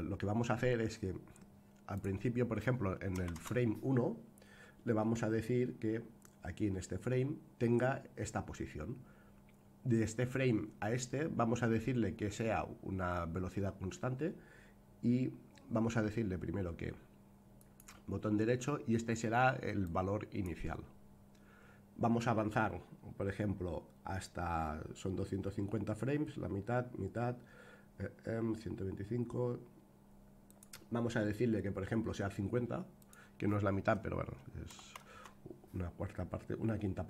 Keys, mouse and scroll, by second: 1.9-4.1 drag, 17.5-23.1 right drag, 30.5 click, 32.9-36.1 drag.